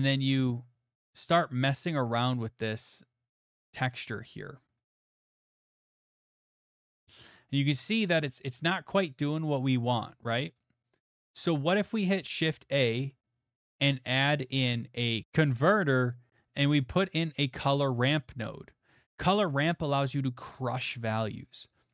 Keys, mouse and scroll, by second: 1.4 click, 3.3 click, 4.7 click, 6.6 click, 8.6 click, 9.5-10.2 scroll, 11.1 click, 11.1 scroll, 11.9 shift+a, 17.0 click, 18.2 click, 19.6 click, 19.8 middle click, 19.9 middle click, 20.4 middle click, 20.7 middle click, 20.7 middle click, 21.2 middle click.